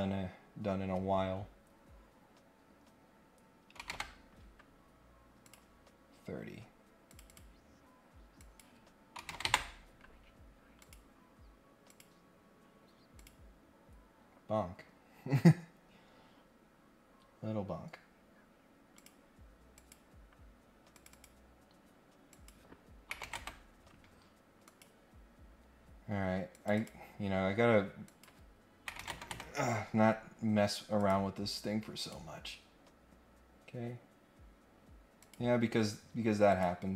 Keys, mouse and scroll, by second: 5.4 click, 6.4 scroll up 1, 7.0 click, 7.3 click, 8.3 click, 10.8 click, 11.9 click, 13.1 click, 15.8 scroll up 2, 18.9 click, 19.7 click, 20.9 click, 22.3 click, 24.6 click, 25.6 scroll up 1, 26.5 click, 26.7 click, 28.0 click, 30.2 scroll up 1, 31.0 click, 32.0 click, 35.2 click, 36.5 click.